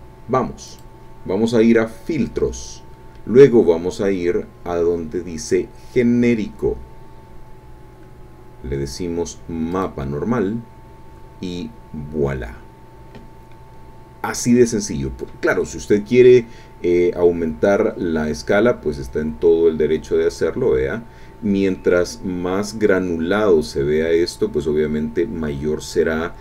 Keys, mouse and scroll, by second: 0.7 click, 9.7 click, 17.9 scroll up 1, 18.0 scroll down 1, 18.0-19.5 scroll up 3, 19.7-20.0 scroll up 2, 20.3-20.6 scroll up 2.